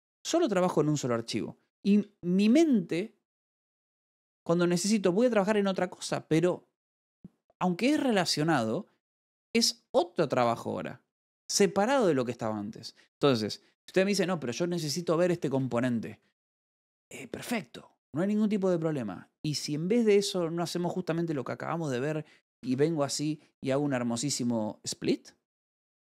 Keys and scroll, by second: 2.9 6, 14.2 ctrl+6, 15.0-15.8 typing, 18.0-18.7 typing, 19.8 Escape, 23.0 space, 23.1 w.